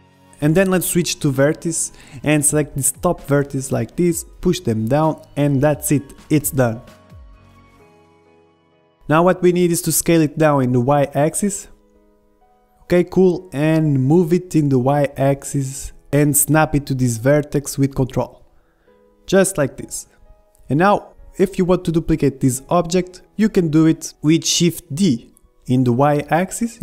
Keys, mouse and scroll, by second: 0.0 ctrl+Tab, 1.8 a, 2.0 b, 2.9-4.6 drag, 6.0 click, 7.0-9.1 middle drag, 9.1 Tab, 9.5-11.2 middle drag, 10.3 s, 13.0 KP_1, 13.8 middle click, 15.7-19.3 drag, 19.3 shift+d.